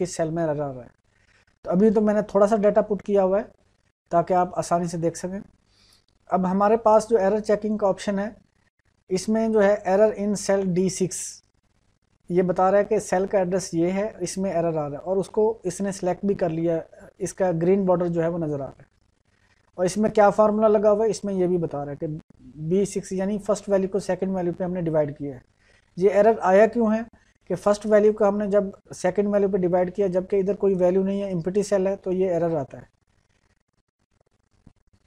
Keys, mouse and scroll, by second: 7.1-10.1 drag.